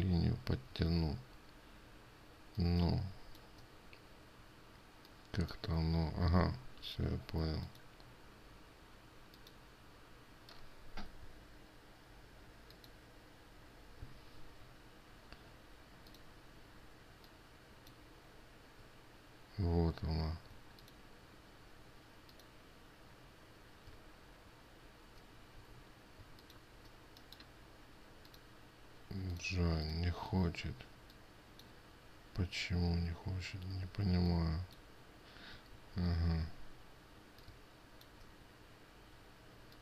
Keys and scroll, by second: 7.3 ctrl+z, 36.2 ctrl+z.